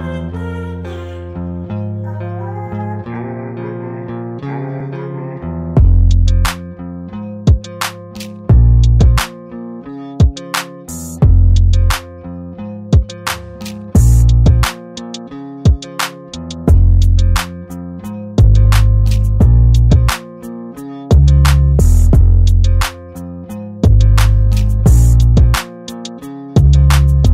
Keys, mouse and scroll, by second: 0.7 alt+scroll up 1, 1.2 l, 2.7-3.9 typing, 2.7 click, 3.1 click, 3.4 click, 3.7 alt+scroll down 1, 4.0 click, 5.3 ctrl+j, 7.7 click, 9.6 ctrl+t, 10.1 right click, 10.8 click, 15.3 alt+scroll up 1, 15.8 scroll up 1, 16.1 right click, 17.1 click, 20.4 space, 20.5 click, 20.6 space, 20.6-21.0 alt+scroll down 2, 21.6 click, 25.1 space, 25.2 click, 25.3 alt+scroll up 1, 25.6 click, 26.2 Return, 26.7-27.3 alt+scroll down 2.